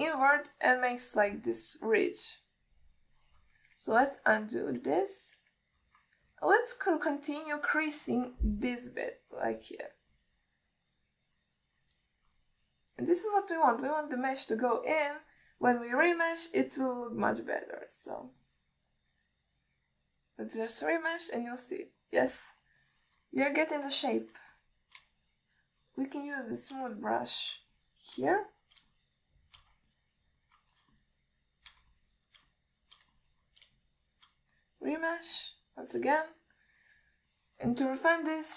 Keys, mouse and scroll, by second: 0.2-1.3 drag, 1.4 alt+middle click, 2.9-4.0 drag, 4.4 middle click, 5.0 ctrl+z, 7.5 middle click, 8.2 click, 9.3 middle click, 9.7-10.7 drag, 10.8-11.1 alt+middle drag, 11.4-13.5 drag, 13.8 alt+middle click, 14.5-16.5 drag, 16.7-17.0 alt+middle drag, 17.3-19.5 drag, 19.7-20.3 middle drag, 20.9 middle click, 21.8-22.9 drag, 23.3 middle click, 24.1 ctrl+alt+middle click, 24.8 middle click, 25.3 ctrl+middle click, 25.8 middle click, 26.3-28.0 shift+drag, 28.2 alt+middle click, 29.0 shift+click, 29.6 middle click, 30.2 shift+click, 31.2 middle click, 31.7 ctrl+alt+middle click, 32.2 shift+click, 32.9 middle click, 33.2 middle click, 33.8 shift+click, 34.4 middle click, 35.0 shift+click, 36.1-37.2 drag, 37.4-38.3 alt+middle drag.